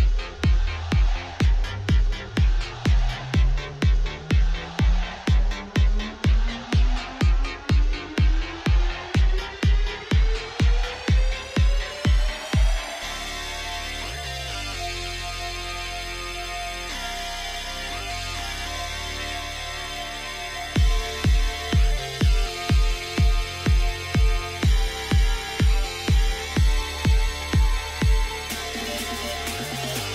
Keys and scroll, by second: 0.0 m, 1.1 Return, 4.4 r, 6.5 r, 7.0 z, 8.9 shift+d, 9.0 shift+z, 11.1 r, 11.8 g, 11.8 z, 12.3 r, 13.5 Escape, 17.0 m, 18.6 Tab, 25.1 g, 27.2 g, 29.1 g, 29.9 g.